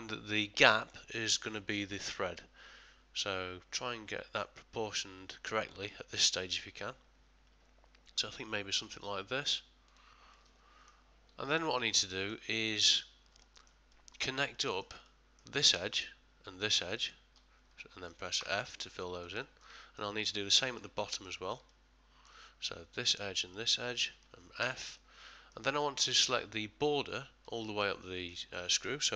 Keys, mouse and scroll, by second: 10.3 middle click, 11.4 middle click, 12.1 ctrl+middle click, 12.5 ctrl+middle click, 13.4 shift+middle click, 13.9 middle click, 14.5 ctrl+middle click, 15.0 middle click, 15.8 middle click, 15.8 click, 16.9 shift+click, 18.4 f, 19.0 ctrl+middle click, 19.4 ctrl+middle click, 19.8 shift+middle click, 20.2 ctrl+middle click, 21.1 middle click, 21.7 ctrl+middle click, 23.0 click, 23.5 shift+click, 24.6 f, 25.0 middle click, 25.8 ctrl+middle click, 26.2 ctrl+middle click, 27.6 middle click.